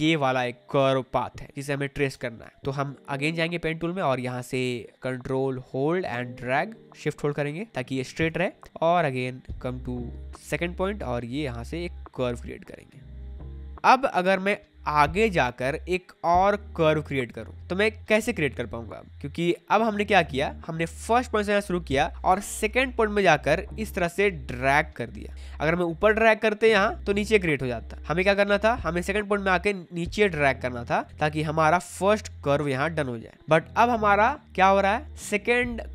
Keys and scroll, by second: 2.1 space, 20.2 ctrl+z, 27.9 ctrl+z.